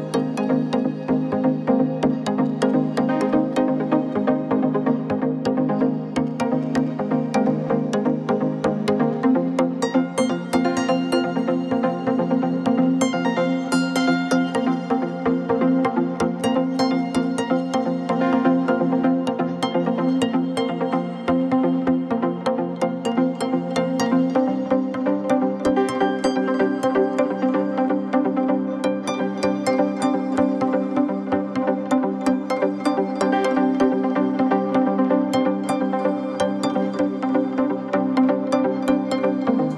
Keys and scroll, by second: 4.3 ctrl+0, 10.0 ctrl+=, 11.1 ctrl+=, 11.5 space, 16.2 ctrl+=, 28.6 Up, 29.1 Down, 29.2 Up, 31.2 ctrl+0, 33.8 shift+Down, 34.6 shift+Up, 34.8 shift+Down, 35.0 shift+Up, 35.4 shift+Down, 37.8 shift+Right, 38.0 shift+Left, 38.3 ctrl+z, 38.9 ctrl+=.